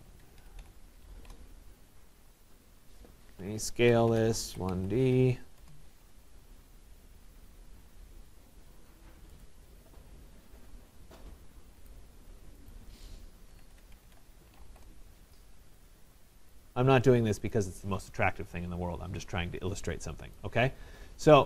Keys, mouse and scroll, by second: 0.0-1.6 typing, 2.5 click, 3.5-5.6 typing, 6.5 middle click, 7.1 middle click, 9.4 click, 12.0 click, 12.7 click, 13.3-15.2 typing, 15.9 click, 16.5 Return, 16.5 right click, 17.5 click, 20.4 right click.